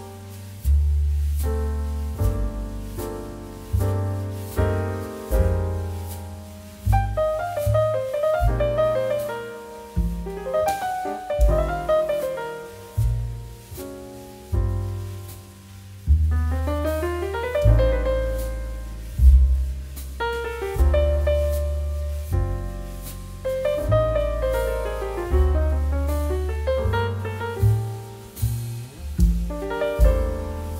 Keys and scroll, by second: 0.8 space, 3.7 space, 4.7 ctrl+z, 5.5 space, 9.4 space, 10.4 space, 19.5 ctrl+j, 21.2 BackSpace.